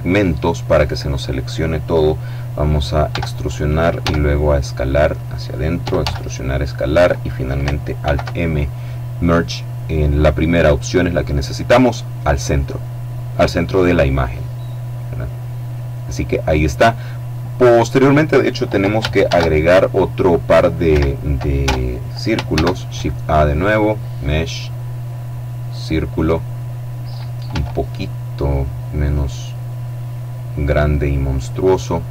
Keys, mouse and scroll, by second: 2.7 e, 3.6 s, 4.7 click, 5.4 e, 5.7 s, 6.3 click, 7.7 alt+m, 12.1 click, 13.7-14.2 scroll down 1, 14.2 middle click, 18.9 shift+a, 20.5 Escape, 21.2 Tab, 22.1 shift+a, 25.3 click, 27.1 s, 29.5 click, 30.4-32.1 drag.